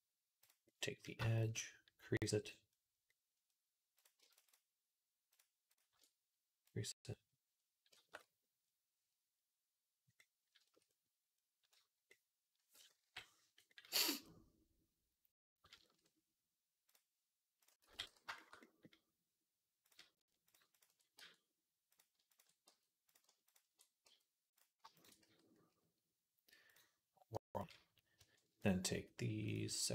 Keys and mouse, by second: 0.5 middle click, 0.5 x, 2.6 click, 3.8 alt+shift+middle click, 4.3 alt+shift+click, 5.2-6.5 alt+shift+middle drag, 6.5-17.5 drag, 15.6 /, 17.5-19.7 middle drag, 17.7 x, 19.7 click, 20.6 ctrl+click, 21.0 f, 21.8 click, 22.5 f, 22.9 click, 23.3 ctrl+click, 24.7 f, 24.8 alt+shift+click, 25.1 f, 26.6 click, 27.2-28.4 middle drag, 28.4 alt+shift+click, 29.4-29.9 alt+shift+middle drag.